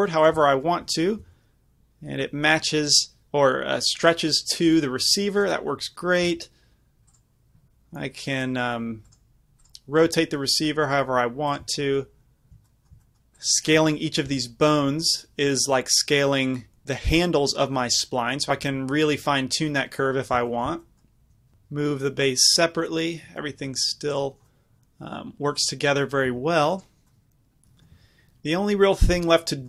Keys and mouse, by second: 0.2-3.2 drag, 1.3 g, 5.6-11.6 drag, 6.3 r, 7.2-9.6 right drag, 10.2 r, 11.6-16.7 middle drag, 14.4 s, 18.7 s, 20.4-21.5 right drag, 21.5-24.2 middle drag, 21.6 g, 24.7-28.0 middle drag, 26.4 g.